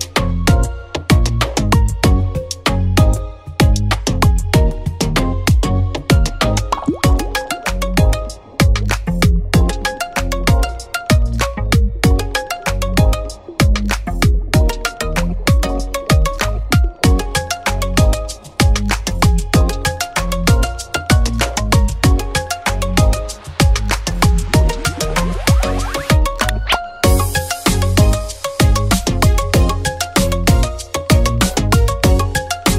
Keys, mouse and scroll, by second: 0.9-2.4 drag, 2.2-3.1 typing, 4.2 click, 9.5-9.9 scroll down 1, 9.5 typing, 10.0-11.4 drag, 17.2 scroll up 1, 17.6 typing, 21.1 click, 21.4 click, 21.4 typing, 23.5 click, 24.8 scroll down 1, 25.6-27.8 drag, 27.5 typing, 27.8 scroll up 1, 29.7-31.9 drag.